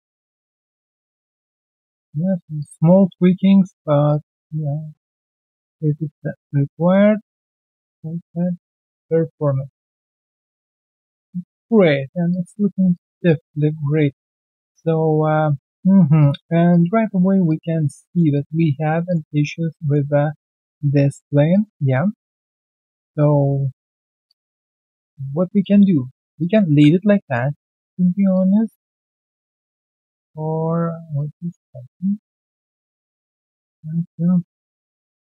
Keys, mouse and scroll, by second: 0.3 alt+middle click, 1.7 double click, 1.9 r, 2.5 ctrl+click, 2.9 ctrl+r, 3.3 alt+middle click, 4.6 w, 7.4-7.7 alt+scroll down 1, 7.8 alt+middle click, 8.0 alt+scroll down 2, 8.3 right click, 9.2 alt+scroll down 1, 9.5 alt+middle click, 10.5 alt+click, 11.3 alt+middle click, 11.6 alt+click, 11.9 alt+middle click, 12.3 alt+click, 12.9 alt+click, 15.3 alt+scroll down 1, 15.5 alt+middle click, 16.5 alt+right click, 16.7 alt+click, 16.9 alt+middle click, 17.2 alt+right click, 17.4 alt+click, 17.8 alt+middle click, 18.0 alt+right click, 18.3 alt+click, 18.6 alt+middle click, 19.4-19.7 alt+scroll down 1, 19.7 alt+middle click, 20.0 alt+right click, 20.3 alt+click, 21.8 alt+middle click, 22.3 alt+click, 22.8-23.1 alt+scroll down 1, 23.1 alt+click, 23.4-23.7 alt+scroll down 1, 23.8 alt+click, 24.5 alt+right click, 24.7 alt+click, 25.0 alt+middle click, 25.3 alt+right click, 25.6 alt+click, 25.9 alt+middle click, 26.1 alt+right click, 26.4 alt+click, 26.7 alt+right click, 27.1 alt+middle click, 27.5 alt+right click, 27.7 alt+click, 27.9 alt+middle click, 28.3 alt+click, 28.9 alt+middle click, 29.9 right click, 31.8 w, 32.8 typing, 32.8 alt+click, 33.1 alt+middle click.